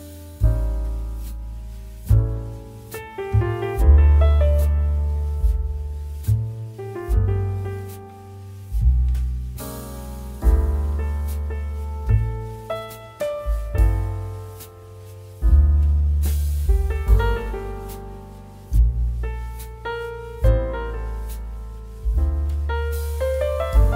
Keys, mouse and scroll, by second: 0.1 click, 0.1 click, 1.2 click, 3.0 click, 4.7 click, 6.2 click, 8.7 click, 8.9 typing, 10.2 click, 11.0 ctrl+d, 11.3 typing, 12.3 ctrl+t, 12.6 ctrl+t, 13.3 click, 14.2 ctrl+t, 14.6 right click, 15.6 click, 15.9 typing, 17.1 typing, 20.6 click, 21.4-22.0 scroll down 2, 22.5 scroll up 1, 22.5-23.5 typing, 23.3 scroll up 1.